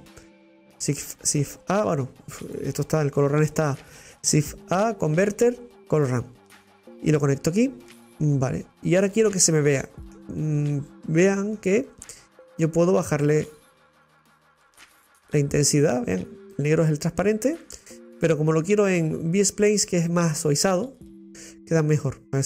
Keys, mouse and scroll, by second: 3.4 Delete, 6.9 shift+a, 8.1-12.5 middle drag, 12.6-17.5 drag, 20.0-22.4 drag.